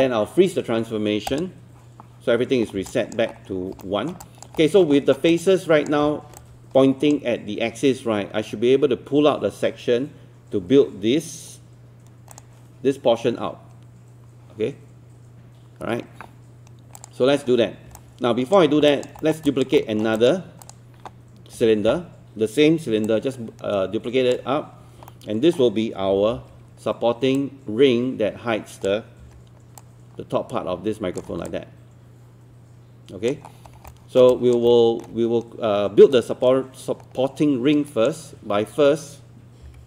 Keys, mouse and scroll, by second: 2.7 scroll down 1, 2.9 alt+click, 3.8 alt+scroll up 1, 3.8 alt+middle click, 4.2 alt+click, 4.6 alt+middle click, 5.0 alt+middle click, 5.3 alt+click, 6.1-6.4 scroll down 1, 6.4-17.5 drag, 17.5-18.0 scroll down 1, 18.0 click, 18.9 alt+click, 19.2 alt+middle click, 19.5 alt+click, 20.2 click, 21.6 w, 23.1 shift+click, 25.1 alt+middle click, 26.1 alt+e, 27.4-29.1 drag, 29.2 w, 29.8-31.3 drag, 31.5-33.3 alt+drag, 33.5-33.9 scroll up 2, 33.9 alt+middle click, 34.7 alt+middle click, 36.2-38.1 right drag, 39.6 b.